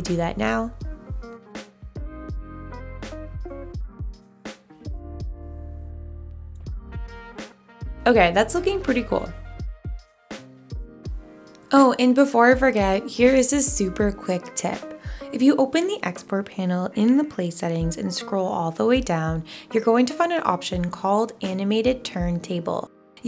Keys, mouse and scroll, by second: 4.3-5.4 typing.